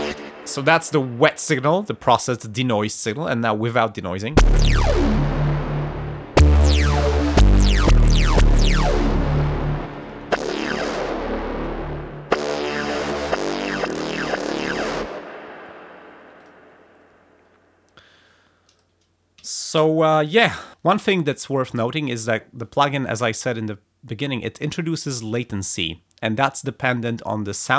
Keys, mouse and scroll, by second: 0.0 space, 3.1 click, 4.2 space, 9.8 space, 9.9 click, 14.9 space, 16.3 click, 16.8 scroll up 2, 17.1-17.5 scroll down 2, 18.7 click, 19.3 a, 19.7 f.